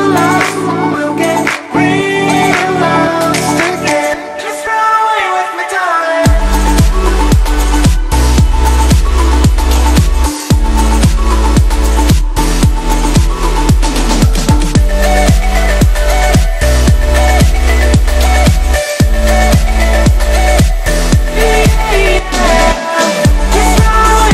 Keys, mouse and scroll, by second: 1.7 ctrl+click, 3.2 click, 8.3 ctrl+-, 9.1 space, 9.3 click, 9.4-9.8 space, 11.2 ctrl+-, 11.4 space, 11.6 click, 11.8-12.1 space, 12.2 click, 15.3 click, 18.3 space, 18.5 click, 18.7-19.0 space, 19.5-20.7 drag.